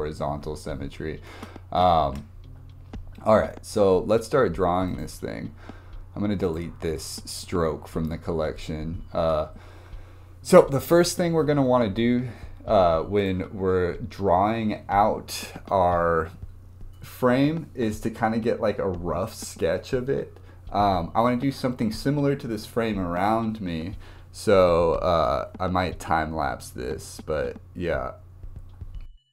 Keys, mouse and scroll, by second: 1.3 ctrl+z, 2.1 ctrl+z, 4.9 click, 5.1-8.1 right drag, 8.7-9.2 scroll up 1.